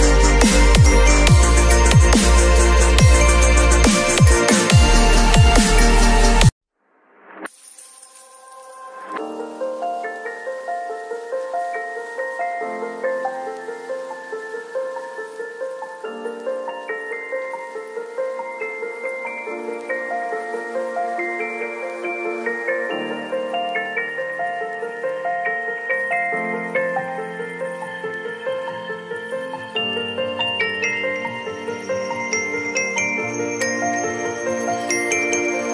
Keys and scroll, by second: 1.9 v, 3.2 ctrl+l, 6.3 Return, 8.6 space, 8.8 ctrl+a, 9.0 ctrl+c, 9.2 ctrl+w, 9.5 ctrl+v, 9.8 ctrl+t, 19.8 space, 21.9 b, 28.8 x, 31.2 v, 34.0 b.